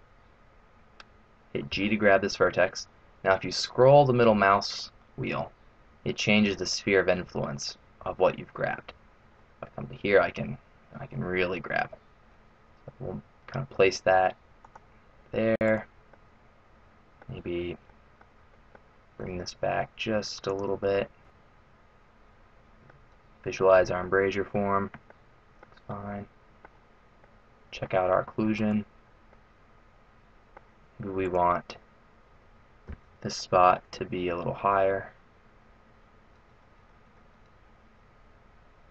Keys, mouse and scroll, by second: 0.2-1.4 scroll down 2, 1.7 g, 15.6 right click, 16.0 middle click, 17.9 middle click, 18.4 middle click, 19.0 g, 20.9 middle click, 24.0 middle click, 25.1 middle click, 26.0 middle click, 27.1 scroll up 1, 27.3 middle click, 28.6 right click, 29.4 middle click, 31.3 right click, 32.8 g.